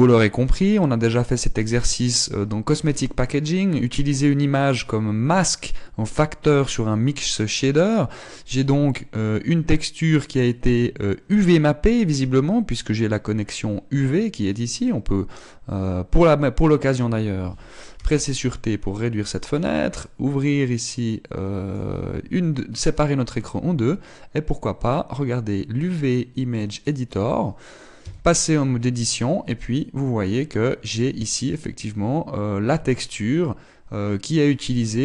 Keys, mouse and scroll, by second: 1.7 scroll up 1, 18.4 t, 20.0 click, 28.6 Tab, 33.3 shift+middle click, 33.3-35.0 scroll down 8.